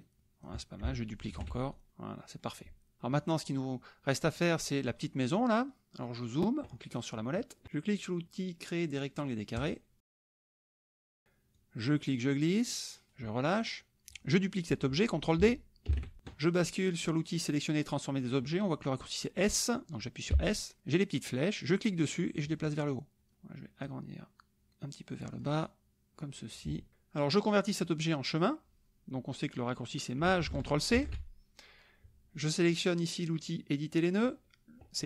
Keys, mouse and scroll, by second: 1.3 ctrl+d, 1.7 ctrl+click, 3.0 click, 5.7 click, 9.6 click, 11.5-13.2 drag, 13.5 middle click, 15.9 ctrl+d, 20.4 s, 21.7-23.3 drag, 23.8-25.6 drag, 26.6 shift+click, 31.0 ctrl+shift+c.